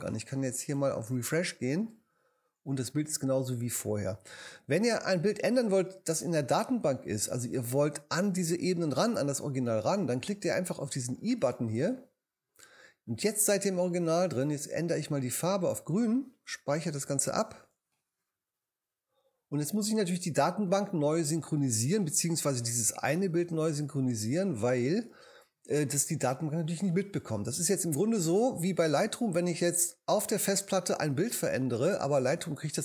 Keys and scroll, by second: 17.3 super+s.